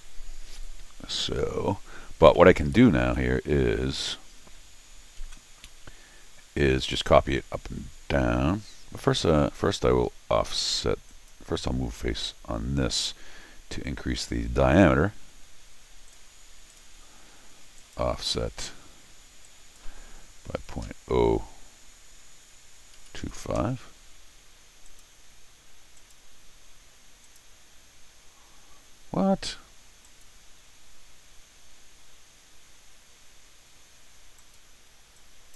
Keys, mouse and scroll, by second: 0.9 scroll down 2, 1.1 middle click, 1.9 scroll up 1, 2.3 middle click, 3.1 middle click, 8.8-9.9 scroll up 6, 11.1 click, 14.2 click, 16.1 click, 16.7 click, 17.8 click, 19.4 click, 24.9 click, 26.0 click, 27.2 click, 30.0 click, 34.4 click, 35.2 click.